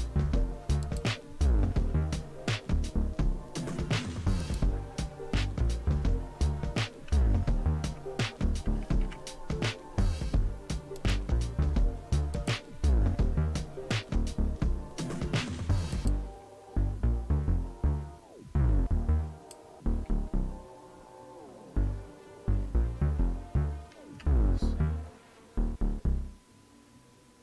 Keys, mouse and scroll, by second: 0.8 click, 4.4 click, 8.7 super+w, 11.0 right click, 12.3 click, 13.2 click, 15.9 click, 19.4 click.